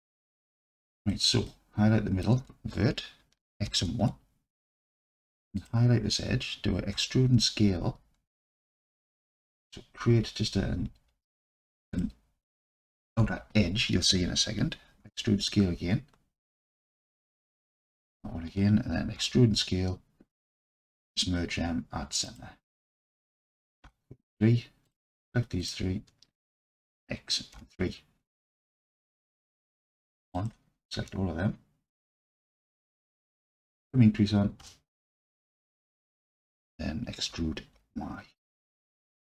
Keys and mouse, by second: 1.5 alt+click, 3.6 x, 5.6 alt+click, 6.9 e, 7.4 s, 11.9 shift+click, 15.1 e, 15.4 s, 18.0 shift+click, 19.2 e, 19.6 s, 20.4 click, 21.1 m, 23.9 3, 26.9 x, 28.6-29.2 alt+drag, 29.7 1, 30.4-31.1 alt+drag, 32.2 n, 33.5-35.1 drag, 35.7 alt+click, 37.4 e, 37.8 y.